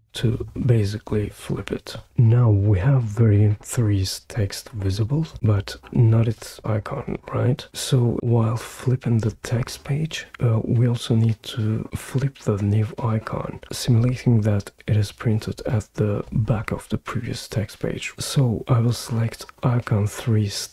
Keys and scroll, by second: 0.0-0.2 typing.